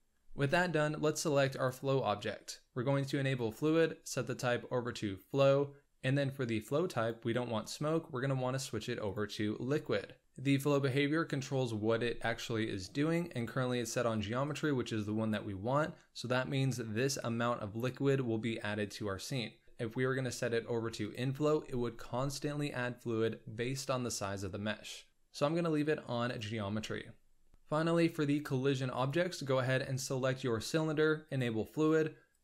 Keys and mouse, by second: 1.5 click, 3.4 click, 4.3-5.2 drag, 7.0-9.1 drag, 10.8-14.5 drag, 19.6-21.1 drag, 25.1 click, 29.0 click, 31.3 click, 32.3-32.4 drag.